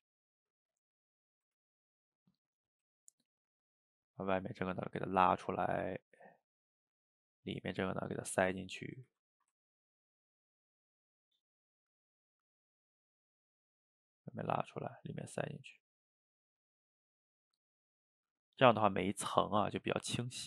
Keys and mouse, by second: 0.1 ctrl+z, 0.2 middle click, 0.7 click, 1.6 ctrl+z, 1.9 click, 2.8 f, 3.1 middle click, 3.7-5.1 drag, 5.1 middle click, 5.8 click, 6.4 middle click, 7.0-8.5 drag, 8.5 middle click, 9.1 ctrl+z, 9.4-10.5 ctrl+shift+middle drag, 10.5-12.0 drag, 12.0 middle click, 12.9-15.0 drag, 15.0 middle click, 16.0-17.3 drag, 17.3 middle click, 17.9 click, 18.7 middle click, 19.4 click, 20.3-20.4 middle drag.